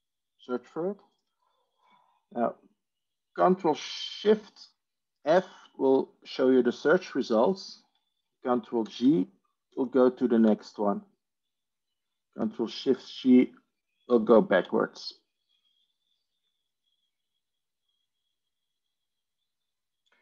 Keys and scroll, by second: 5.1 ctrl+shift+f, 8.8 ctrl+g, 9.6 ctrl+g, 10.3 ctrl+g, 12.8 ctrl+shift+g, 14.0 ctrl+shift+g.